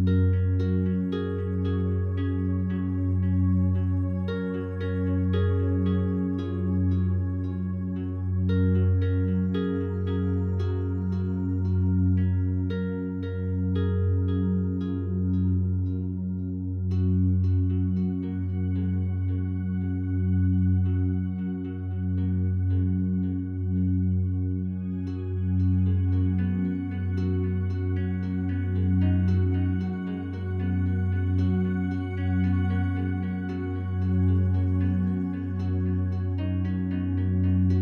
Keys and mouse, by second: 0.2 y, 2.3-4.5 alt+drag, 5.4 s, 5.7 x, 7.6-10.1 drag, 7.6 typing, 10.6 typing, 12.7-15.9 alt+drag, 16.7-17.1 typing, 18.4-20.5 alt+drag, 21.4 click, 22.4 click, 22.6 click, 23.4 click, 23.9 click, 24.1 click, 26.2 shift+click, 26.5 shift+click, 26.5 typing, 27.6-28.4 typing, 28.8-30.4 shift+drag, 30.2-31.1 typing, 32.1 click, 35.2 click, 35.8 click, 37.4 Tab.